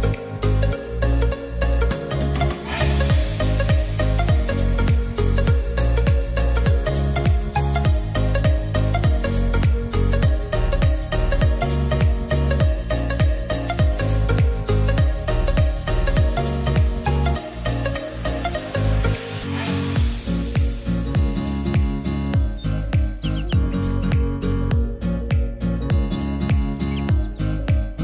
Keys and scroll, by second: 5.2 ctrl+r.